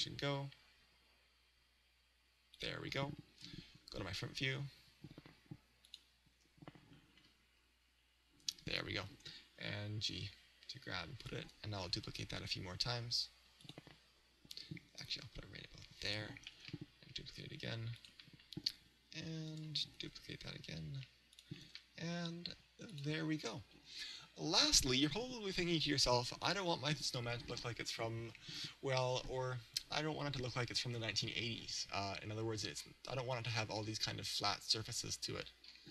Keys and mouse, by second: 2.7-7.8 drag, 7.8 KP_1, 9.2 g, 11.3 click, 12.0 shift+d, 13.7 click, 15.0 g, 16.2 click, 16.5 shift+d, 18.2 click, 19.6-21.4 right drag, 20.1 shift+d, 21.5-24.7 drag.